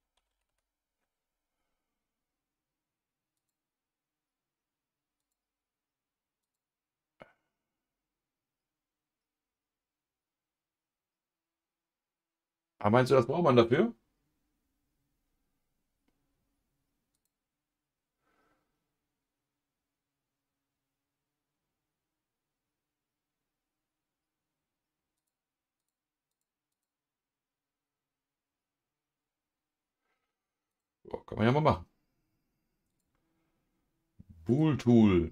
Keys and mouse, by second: 32.9 click, 34.5 click.